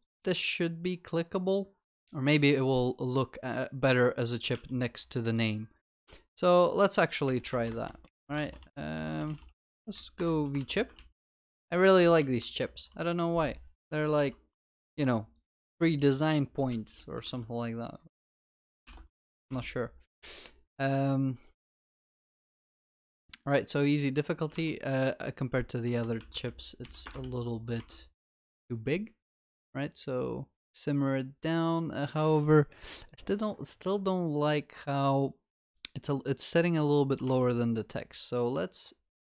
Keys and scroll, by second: 10.2 Return, 11.0 ctrl+s, 12.0 ctrl+w, 14.8 ctrl+x, 15.7 ctrl+v, 16.1 ctrl+s, 17.3 ctrl+s, 19.1 ctrl+y, 21.8 ctrl+s, 27.1 Return, 27.2 ctrl+s.